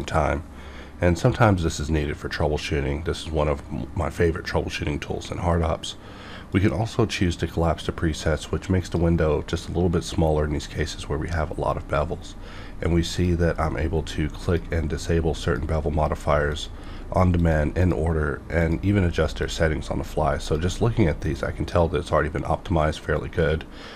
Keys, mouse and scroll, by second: 6.5-11.3 drag, 13.1 click, 17.9 click.